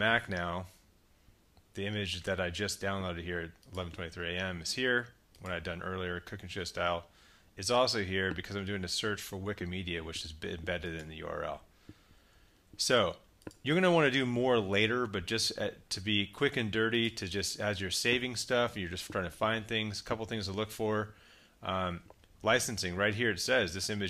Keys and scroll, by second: 12.5 super+w.